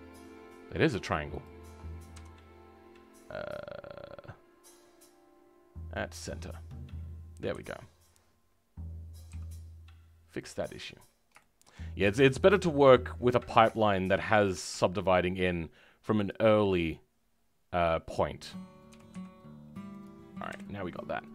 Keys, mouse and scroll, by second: 1.4 shift+click, 7.5 KP_3, 8.0 scroll up 2, 11.0-11.3 scroll down 4, 11.3 shift+middle click, 11.8-12.8 scroll up 2, 14.5 g, 18.9 g, 20.4 KP_1, 20.9-21.3 scroll up 2.